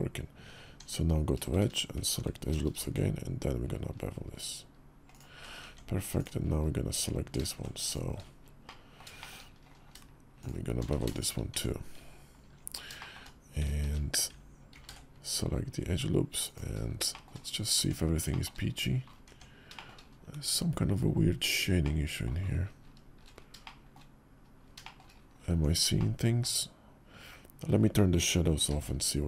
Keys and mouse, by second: 0.4 Tab, 1.3 shift+`, 2.4 ctrl+b, 5.5 Tab, 5.9 click, 7.6 alt+shift+click, 8.4 middle click, 9.0 shift+click, 10.1 shift+click, 10.7 ctrl+z, 11.3 Tab, 12.8 shift+click, 13.6 shift+`, 14.5 ctrl+b, 16.9 shift+click, 17.5 Tab, 18.1 shift+click, 19.0 Tab, 19.5 shift+click, 21.6 click, 23.4 shift+click, 24.6 shift+click, 25.3 Tab, 25.8-26.2 shift+drag, 28.6 alt+v.